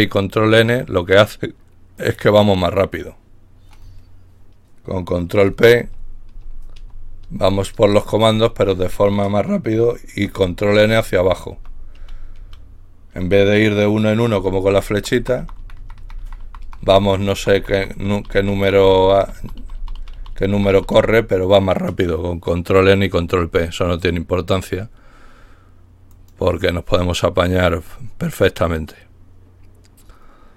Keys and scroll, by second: 5.8 ctrl+p, 6.3 ctrl+p, 6.8 ctrl+p, 7.2 ctrl+p, 7.8 ctrl+p, 8.4 ctrl+p, 10.3 ctrl+n, 10.7 ctrl+n, 11.1 ctrl+n, 11.6 ctrl+n, 12.0 ctrl+n, 14.4 Up, 14.7 Up, 15.0 Up, 15.2 Up, 15.4 Up, 15.6 Up, 15.8 Up, 16.0 Up, 16.2 Up, 16.3 ctrl+n, 16.5 Up, 16.7 Up, 17.4 ctrl+Down, 17.9 ctrl+Down, 18.6 Down, 18.8 Down, 19.0 Down, 19.5 Down, 20.0 Down, 20.4 Down, 20.6 Down, 21.0 typing, 22.2-23.5 typing.